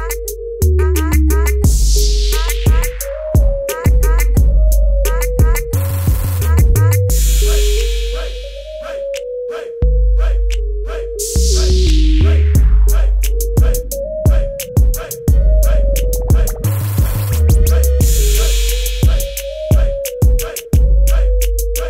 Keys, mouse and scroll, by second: 0.5 click, 4.9 typing, 6.1-7.7 typing, 7.9 click, 9.2-10.5 typing, 10.1 click, 12.0 ctrl+l, 13.6 click.